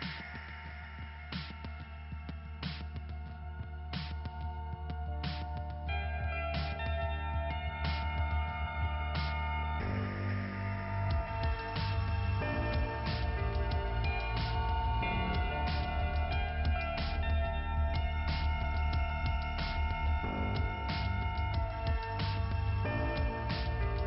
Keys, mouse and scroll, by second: 3.0 click, 3.9 scroll up 2, 6.7 click, 7.3 click, 7.5 click, 8.0 scroll up 2, 8.7 click, 8.8-9.1 scroll up 1, 9.9 click, 11.1 click, 12.2 click, 13.4 click, 14.4 scroll down 2, 16.7 click, 17.2 click, 17.3 double click, 18.1 double click, 20.1 click, 20.9 click, 21.3-22.2 scroll down 2, 22.6 click, 23.1 click, 23.5 click, 23.6 click.